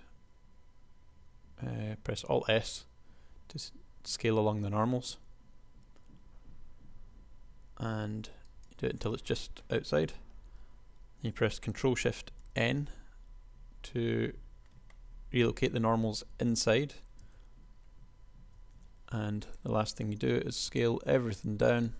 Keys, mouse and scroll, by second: 2.4 alt+s, 12.6 ctrl+shift+n, 17.5 Tab, 18.7 Tab, 20.7 s.